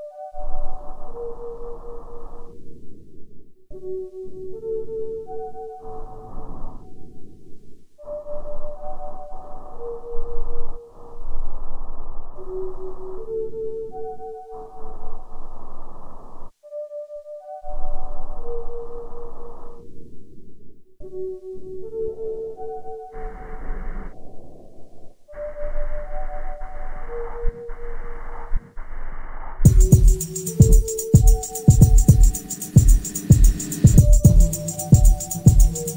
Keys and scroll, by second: 7.8 ], 7.9 Return, 8.5 Delete, 10.5 ], 18.7 ], 24.2 [, 24.5 ], 35.3 4.